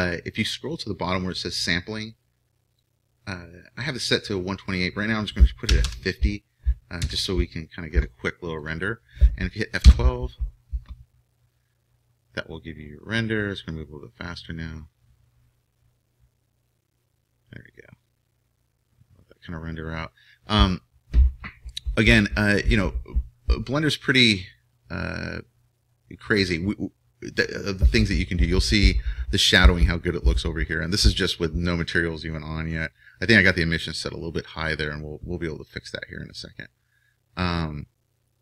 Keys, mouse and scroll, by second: 24.4-27.6 middle drag.